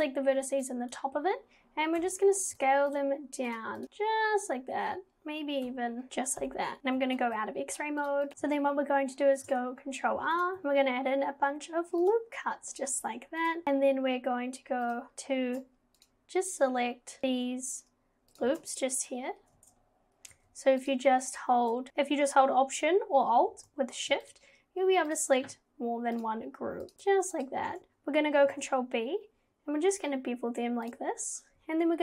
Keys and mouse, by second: 0.9 click, 2.0 s, 2.5 ctrl+z, 3.0-3.8 drag, 5.7 s, 6.1 ctrl+z, 6.8 /, 7.2 alt+z, 10.4 click, 10.6 ctrl+r, 14.9 click, 16.1 alt+shift+click, 18.4 click, 18.7 alt+shift+click, 20.8 alt+click, 26.2 alt+shift+click, 26.9 alt+shift+click, 27.4 alt+shift+click, 28.5 ctrl+b.